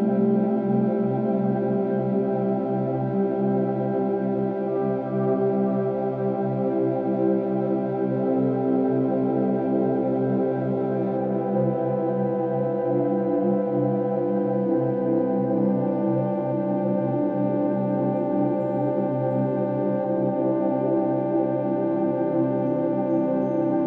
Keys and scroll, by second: 9.0-9.6 space, 11.4 space.